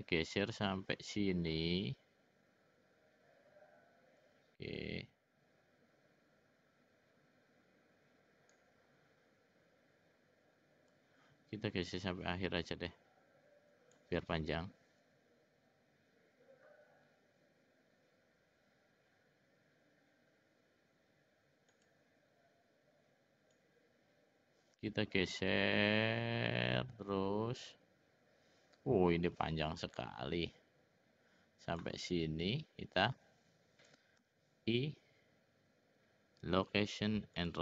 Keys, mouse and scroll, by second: 11.3-14.3 drag, 21.8 click, 23.6-32.2 drag.